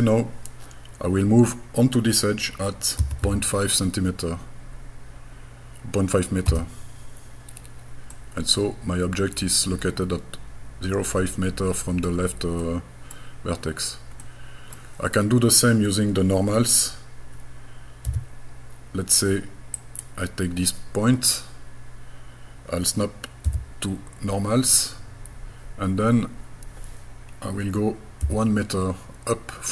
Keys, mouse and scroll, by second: 3.0 KP_Decimal, 3.2 KP_5, 6.5 KP_Enter, 8.1-9.6 middle drag, 12.6 middle click, 13.7-14.2 scroll down 1, 14.2 middle click, 18.1 g, 19.8 click, 23.5 n, 28.3 KP_1.